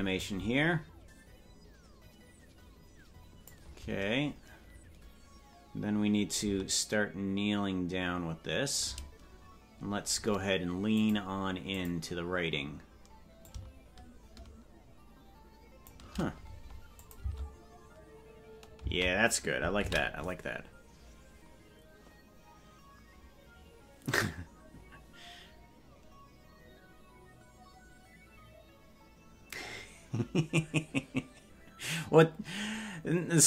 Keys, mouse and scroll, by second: 0.2-3.6 drag, 6.3-8.8 drag, 10.9-12.2 drag, 13.4-15.9 drag, 17.0-18.0 drag, 17.2 space, 18.9 space, 23.1 ctrl+s.